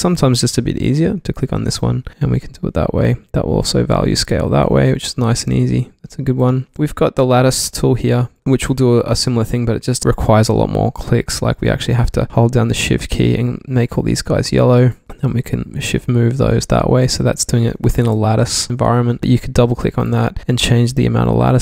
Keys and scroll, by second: 4.7 super+z, 6.6 super+z, 6.7 q, 18.0 super+z.